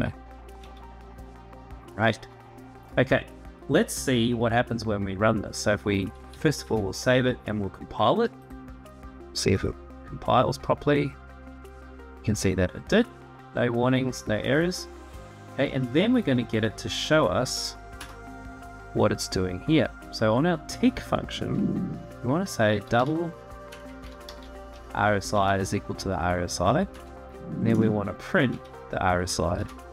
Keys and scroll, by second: 0.3 Tab, 1.7 ctrl+s, 6.3 ctrl+s, 17.7 Return, 22.4-24.6 typing, 26.7 Return, 28.2 Tab, 29.3 ctrl+s.